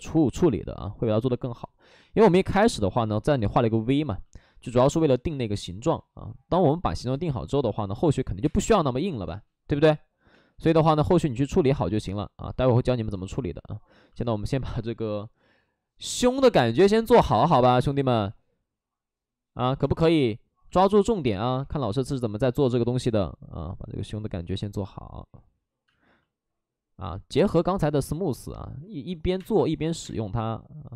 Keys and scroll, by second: 0.4 ctrl+z, 1.9 space, 2.2 ctrl+z, 8.2 5, 8.3 space, 8.8 space, 10.5 ctrl+z, 10.5 space, 16.9 3, 17.1 space, 17.2 3, 18.0 ctrl+z, 21.4 3, 22.6 ctrl+z, 22.8 2, 25.8 space, 29.2 3, 29.3 space, 29.5 3.